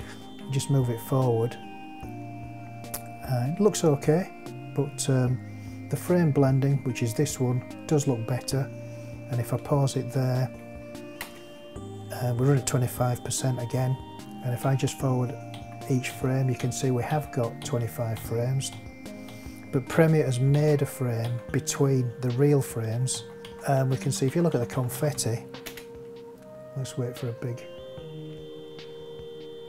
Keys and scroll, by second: 11.2 space, 14.6 Right, 23.1 Right, 25.6 space.